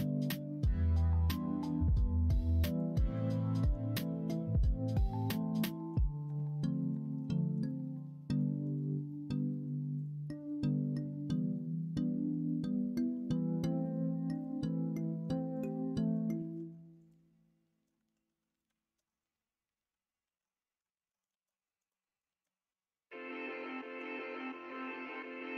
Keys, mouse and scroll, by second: 1.5 ctrl+z, 1.9 ctrl+z, 1.9 ctrl+x, 2.2 ctrl+z, 2.4 ctrl+z, 2.7 ctrl+z, 2.9 ctrl+z, 3.5 ctrl+z, 3.8 ctrl+z, 4.7 ctrl+z, 5.1 ctrl+z, 5.5 ctrl+z, 5.8 ctrl+z, 6.2 ctrl+z, 6.5 ctrl+z, 6.9 ctrl+z, 7.2 ctrl+z, 7.5 ctrl+z, 7.8 ctrl+z, 8.0 ctrl+z, 8.2 ctrl+z, 8.6 ctrl+z, 9.4 middle click, 10.2 middle click, 10.7 middle click, 12.0-13.1 middle drag, 14.2 alt+shift+click, 15.5 alt+shift+click, 16.3 ctrl+z, 16.9 alt+shift+click, 18.2 ctrl+z, 20.2 alt+z, 20.8 alt+z, 22.2 shift+z, 24.5 alt+z.